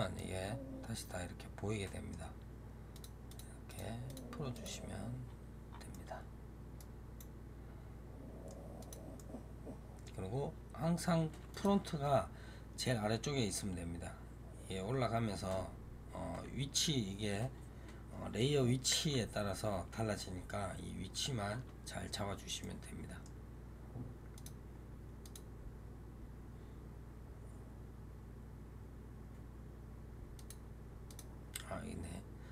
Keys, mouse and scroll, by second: 0.0-2.8 middle drag, 2.8 click, 3.2 click, 3.5 click, 4.0 click, 4.4 click, 5.1 scroll down 2, 5.8-8.7 middle drag, 8.7 click, 9.1-10.3 middle drag, 10.3 scroll down 3, 11.4 click, 22.5-24.2 middle drag, 24.2 click, 25.1-28.2 drag, 30.2 click, 31.0 click.